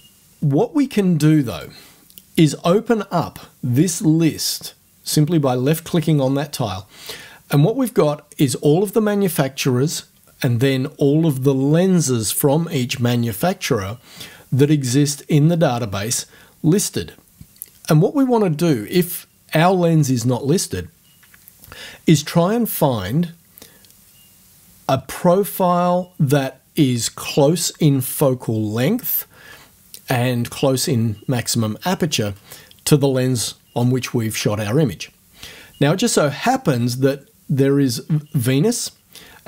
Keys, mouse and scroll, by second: 1.5 click.